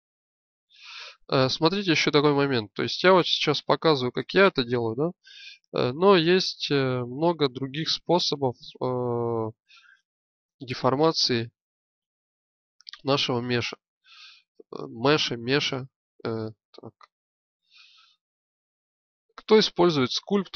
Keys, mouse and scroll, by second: 0.2 click, 1.2 click, 1.4-2.7 middle drag, 3.7 z, 4.6-7.5 drag, 12.5 click, 16.6 ctrl+z, 16.9 ctrl+z, 19.7 click, 20.4-20.5 drag.